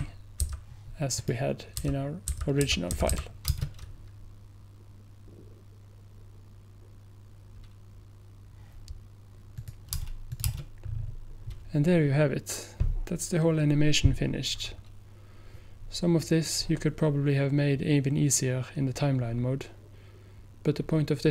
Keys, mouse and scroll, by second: 0.0 p, 0.4 p, 1.2 click, 1.9-3.2 typing, 9.6 click, 10.9 scroll down 1.